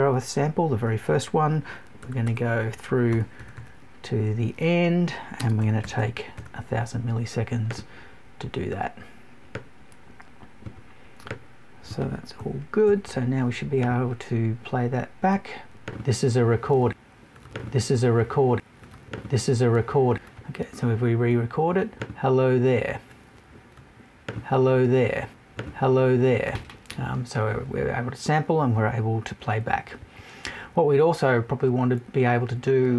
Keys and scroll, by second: 12.4 Right.